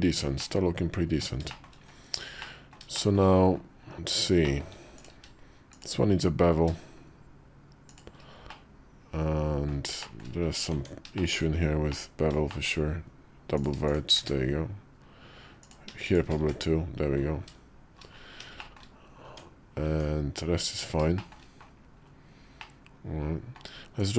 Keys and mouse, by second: 0.3 middle click, 1.3 shift+middle click, 2.3 middle click, 2.8 shift+middle click, 4.3 shift+middle click, 4.8 click, 5.0 q, 8.3-9.5 middle drag, 9.8 shift+middle click, 10.6 Tab, 11.0 shift+middle click, 11.8 middle click, 12.3 shift+middle click, 14.0 1, 15.5 click, 15.9 click, 16.3 1, 18.5 middle click, 19.1 Tab, 19.7 Tab, 21.0 shift+click, 22.5 middle click.